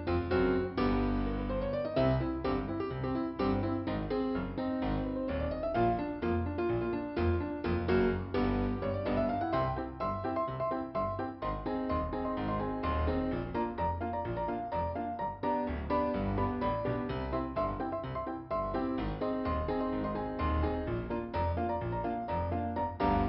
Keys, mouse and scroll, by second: 1.6 click, 1.8 click, 3.6 click, 5.3 scroll down 1, 9.5 scroll up 2, 10.9 scroll down 1, 12.3 scroll up 1, 15.2 click, 21.1-21.7 scroll down 2.